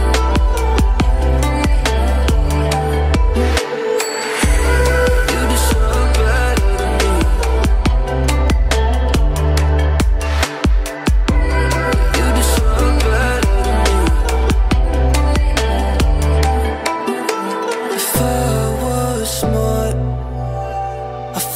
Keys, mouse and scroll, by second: 0.0-1.9 drag, 7.8-9.5 drag.